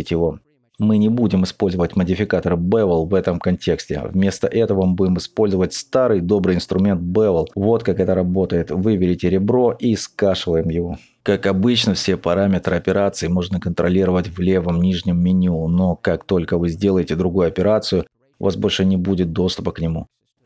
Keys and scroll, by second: 0.6 Return, 1.6 Tab, 2.2 t.